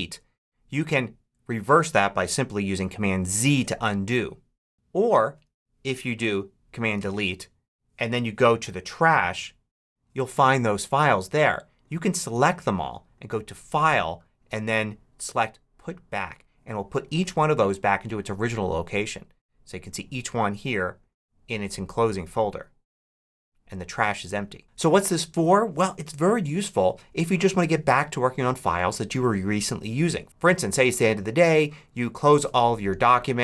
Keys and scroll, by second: 3.3 super+z, 6.7 super+BackSpace.